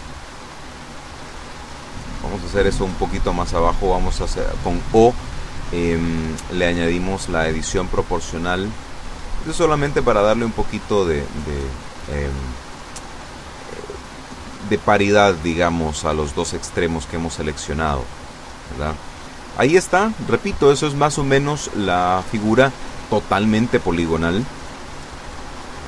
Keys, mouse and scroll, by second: 1.3 o, 4.1 click, 5.0-5.7 scroll down 4, 6.1 scroll down 2, 6.9 scroll down 2, 8.8-9.7 scroll up 4, 15.8 a, 16.9-21.0 middle drag, 22.0 KP_1.